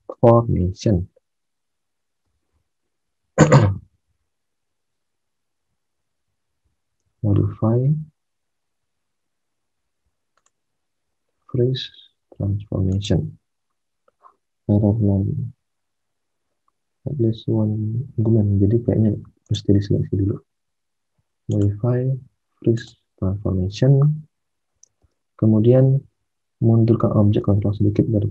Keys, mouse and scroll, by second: 6.9 alt+Tab, 24.8 alt+Tab.